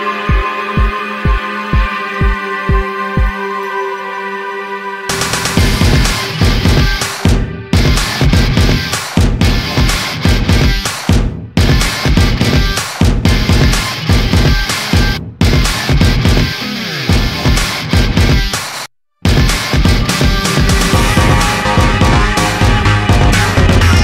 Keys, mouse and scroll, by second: 0.3 click, 1.3 click, 1.9 click, 4.0 click, 4.3 middle click, 4.7 middle click, 5.3 click, 5.8 click, 6.5 click, 8.1 click, 9.7 alt+click, 12.2 click, 12.6 middle click, 13.2 scroll down 1, 14.6 middle click, 15.5 middle click, 16.7 click, 17.5 click, 19.2 click, 20.3 click, 21.9 click, 22.4 click.